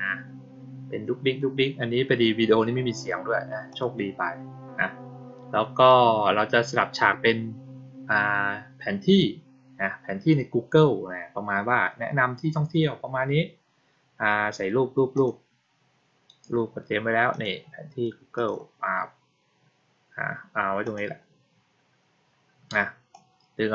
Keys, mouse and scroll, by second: 3.6 click, 15.0 click, 17.2 click, 18.2 click, 20.7 click, 23.0-23.7 drag.